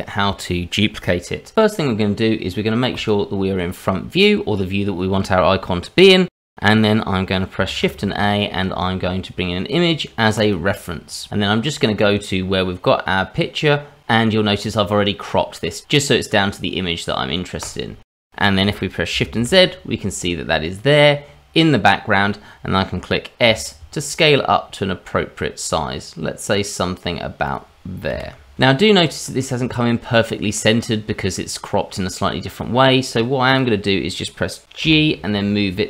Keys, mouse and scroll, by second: 2.9 click, 7.7 shift+a, 19.4 shift+z, 19.9-21.0 scroll up 2, 21.4-22.2 scroll down 1, 22.2 scroll down 1, 22.6-22.9 scroll up 2, 23.1 s, 26.0 g, 27.9-30.7 scroll up 4, 28.2 shift+middle click, 30.7-31.2 scroll up 1, 33.1 click, 33.5 click, 34.8 g.